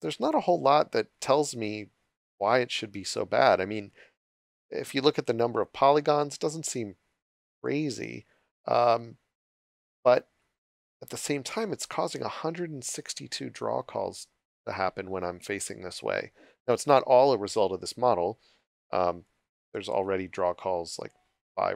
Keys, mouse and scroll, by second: 0.0-0.9 typing, 2.2 click, 9.6-11.2 typing, 11.8 click, 19.2 click.